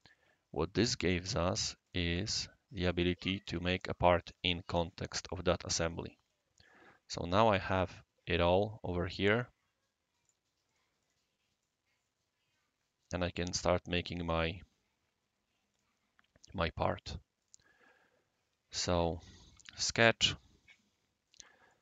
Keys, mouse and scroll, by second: 1.8 click, 6.3 scroll down 1, 6.4-6.7 scroll up 1, 10.2 click, 10.6 click, 11.0 click, 11.6-13.4 right drag, 13.7 scroll down 1, 14.0 scroll up 1, 15.7 click, 17.4 click, 19.6 shift+s, 20.6 click, 20.9-21.2 drag, 21.2 right click.